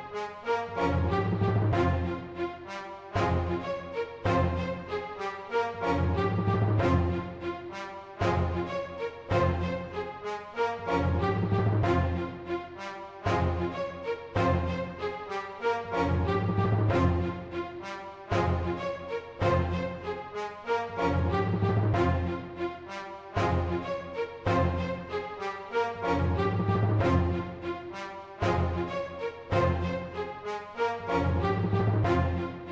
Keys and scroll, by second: 2.4 typing, 4.4-6.1 typing, 13.6-14.0 typing, 19.1 super+a, 20.0-20.7 typing, 22.0 super+z, 22.9-25.6 typing, 31.4-32.7 typing.